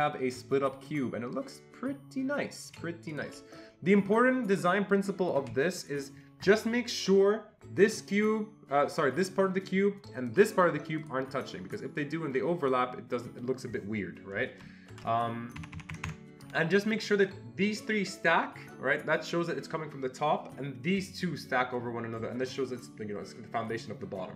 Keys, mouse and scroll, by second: 0.9-3.4 shift+drag, 3.6-5.8 shift+drag, 7.8-10.3 shift+drag, 11.0 click, 12.0 click, 15.0 ctrl+z, 15.6 Escape, 15.8 Escape, 16.0 Escape, 16.1 Escape.